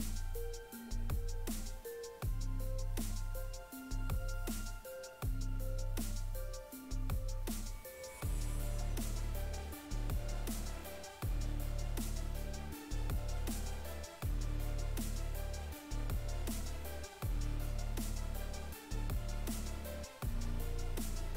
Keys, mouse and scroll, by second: 0.8 click, 1.5 right click, 2.9 right click, 4.4 click, 6.4 right click, 9.9 click, 10.7 right click, 14.4 right click, 18.3 ctrl+right click, 19.3 shift+right click.